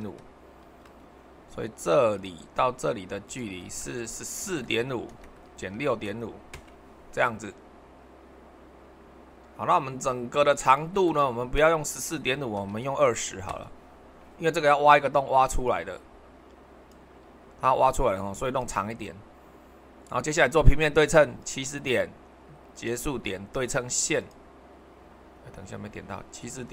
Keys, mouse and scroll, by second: 0.0 super+1, 4.5-6.1 typing, 6.5 Return, 12.6-13.5 typing, 13.5-14.7 Return, 15.6-19.5 drag, 21.4-22.5 drag, 22.7-23.8 drag, 24.2-25.3 drag.